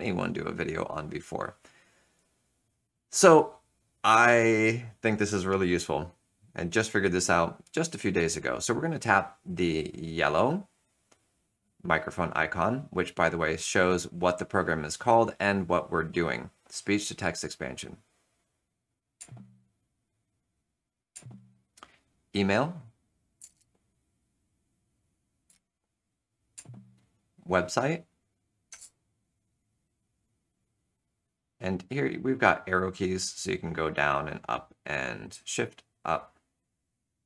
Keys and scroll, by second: 19.1 alt+F2, 23.1-23.9 typing, 25.1 typing, 25.6 Return, 26.5 alt+F2, 28.7 space, 28.7 m, 32.1 Down, 32.8 Up, 33.8 Left, 34.2 Down, 35.7 shift+Up, 36.1 shift+Up.